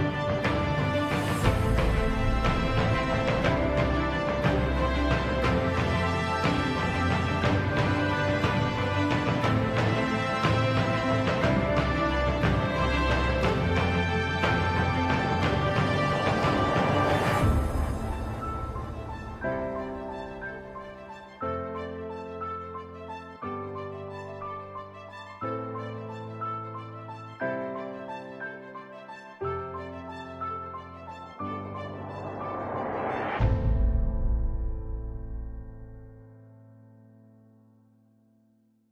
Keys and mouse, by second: 0.3 shift+middle click, 1.3 shift+middle click, 2.9 ctrl+right click, 4.8 ctrl+right click, 8.2 ctrl+right click, 10.0 s, 12.6 g, 15.0 r, 17.6 g, 20.2 middle click, 22.0 2, 23.2 alt+click, 24.3 KP_1, 26.1 r, 28.1 s, 31.7 middle click, 33.7 alt+click, 34.7 KP_1, 36.7 s, 38.8 z.